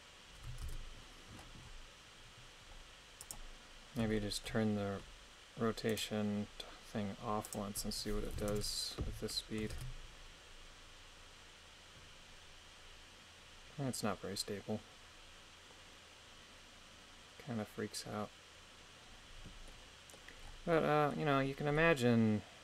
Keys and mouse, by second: 0.7 shift+space, 3.2 click, 4.1 shift+middle click, 5.9 right click, 7.5-8.5 drag, 9.7 shift+space, 19.7-22.6 middle drag.